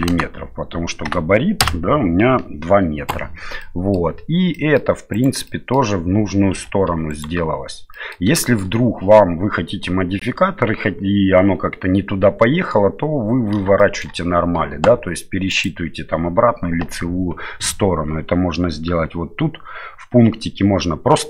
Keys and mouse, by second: 0.1 KP_0, 3.6 middle click, 4.5 middle click, 5.1 right click, 5.5 middle click, 6.6 2, 6.9 3, 7.1 right click, 7.9 middle click, 8.4 shift+middle click, 13.8 shift+middle click, 15.5-21.2 drag.